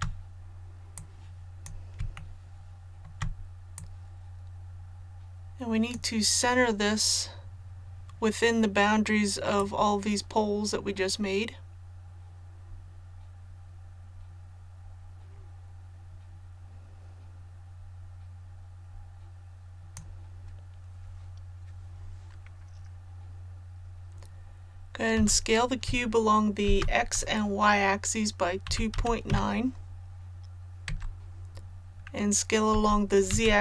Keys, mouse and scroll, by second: 0.9 click, 2.2 shift+middle click, 3.7-6.8 drag, 6.8 scroll up 1, 9.5-20.7 drag, 25.1 s, 26.6 shift+z, 28.6 KP_2, 28.9 KP_Decimal, 29.3 KP_9, 32.7-33.6 typing.